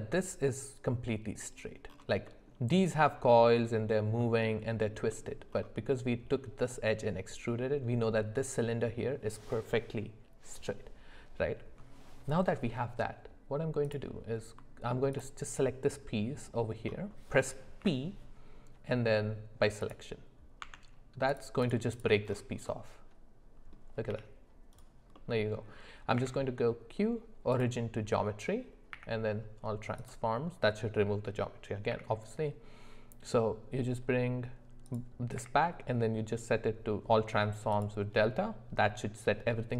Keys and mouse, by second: 2.3 middle click, 4.2 middle click, 5.1 middle click, 13.9 click, 15.1 alt+click, 17.8 p, 20.6 Tab, 21.6 click, 22.7-23.8 middle drag, 24.1 g, 25.2 middle click, 28.9 q, 35.4 q.